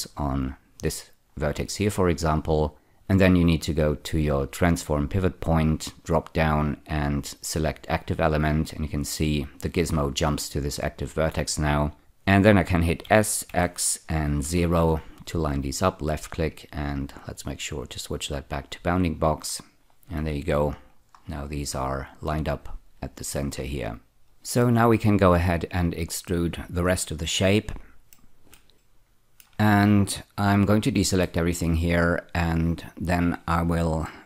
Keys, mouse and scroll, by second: 3.8 click, 8.3 click, 13.0 s, 13.4 x, 14.4 0, 15.2 click, 17.4 click, 18.2 click, 19.2-20.1 scroll down 2, 20.1 F4, 20.7-23.0 scroll down 8, 24.7-26.5 middle drag, 28.1 shift+middle click, 28.8 shift+middle click, 31.0 a, 31.1 a, 32.0-33.8 scroll up 2.